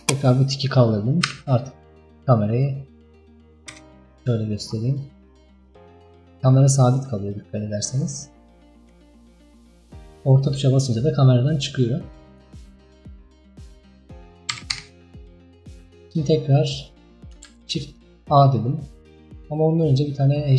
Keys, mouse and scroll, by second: 1.3 n, 2.5-3.8 middle drag, 3.8 KP_0, 4.5-5.0 scroll down 4, 5.0 scroll up 5, 6.0 scroll down 3, 6.5 scroll up 3, 7.0-7.8 scroll down 6, 7.8-8.4 scroll up 4, 8.4-9.0 middle drag, 9.0-9.7 scroll down 4, 9.7-10.4 scroll up 4, 10.4-11.7 scroll down 1, 12.7-13.4 shift+middle drag, 13.4-14.6 scroll down 3, 14.6 KP_5, 14.8 KP_1, 15.4-17.3 scroll up 9, 17.3 scroll up 1, 17.5 shift+a, 19.3-20.0 scroll down 4, 20.1-20.5 middle drag.